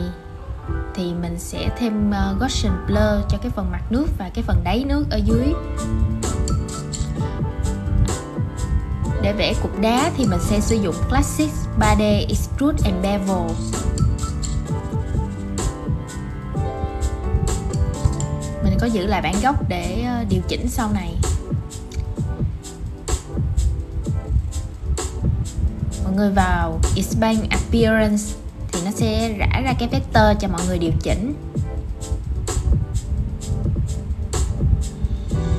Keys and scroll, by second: 0.9 super+z, 14.9 super+x, 16.0 super+v, 19.0 super+c, 22.0 super+z.